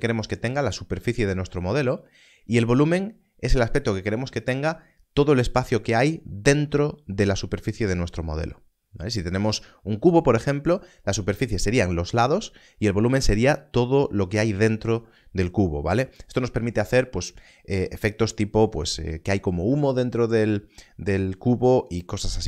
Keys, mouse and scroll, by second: 2.6 click.